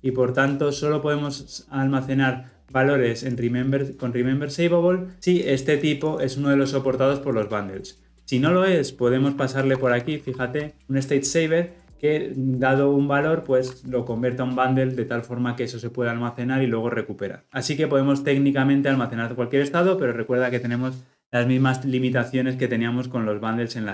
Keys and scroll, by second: 10.1 ctrl+p, 17.5 ctrl+z.